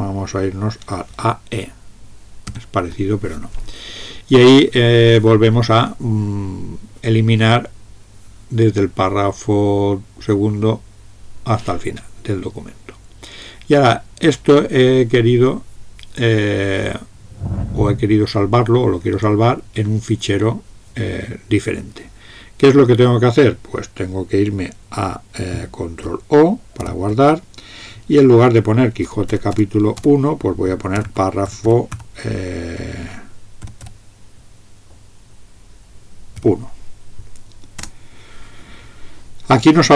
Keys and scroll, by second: 2.5 alt+e, 26.8 ctrl+o, 29.0-32.0 typing, 33.8 typing, 36.3 1, 37.8 Return.